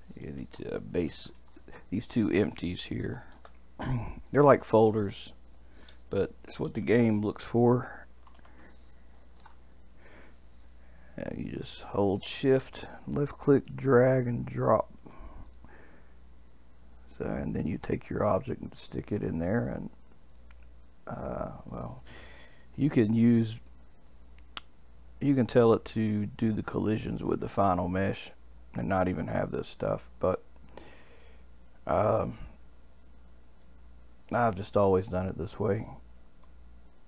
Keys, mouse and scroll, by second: 4.3 click, 4.4-7.5 drag, 13.6 shift+click, 15.4 click, 17.7 click, 18.2 shift+click, 19.6 click, 20.3 click, 33.6-36.6 middle drag.